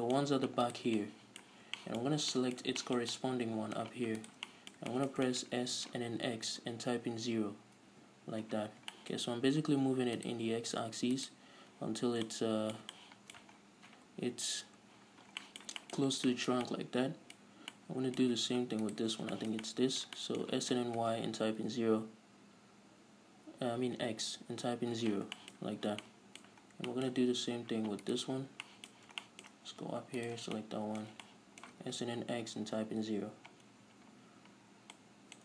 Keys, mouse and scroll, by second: 0.2-1.2 shift+middle drag, 1.2 ctrl+right click, 1.3-4.5 middle drag, 1.9 scroll down 1, 4.5 shift+right click, 4.8-10.5 middle drag, 5.8-6.3 scroll up 2, 6.3 s, 8.4 Return, 8.9-9.3 scroll up 2, 9.5-10.3 scroll up 2, 10.3 scroll up 1, 10.5 right click, 11.7-12.6 ctrl+right drag, 12.6-19.2 middle drag, 13.9-14.7 scroll down 2, 14.7 KP_Decimal, 15.4-15.7 scroll down 2, 16.4 scroll down 1, 17.8-18.1 scroll up 1, 19.2 shift+right click, 19.5 scroll down 1, 19.7-28.4 shift+middle drag, 21.0 s, 25.0 Return, 25.9-26.4 scroll up 2, 27.0 scroll down 2, 28.4 alt+right click, 29.0-30.5 shift+middle drag, 30.5 shift+right click, 30.9-35.4 shift+middle drag, 32.2 s, 33.4 Return, 34.3-34.9 scroll up 2, 34.9-35.3 scroll down 2.